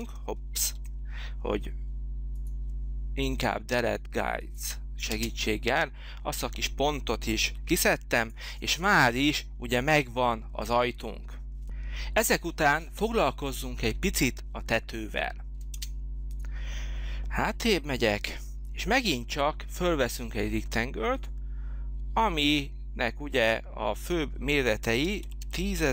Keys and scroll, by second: 0.6 ctrl+z, 5.0 space, 7.5 h, 15.7 space, 16.9 space, 24.6-25.9 typing.